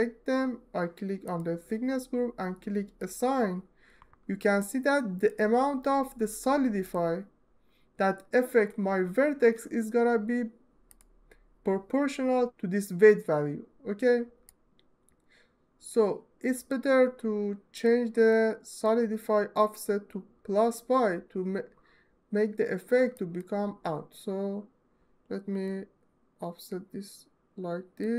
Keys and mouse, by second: 2.6 click, 4.3 alt+middle click, 14.3 alt+middle click, 15.2 alt+middle click, 15.4 alt+middle click, 15.7 alt+middle click, 25.3-27.7 drag.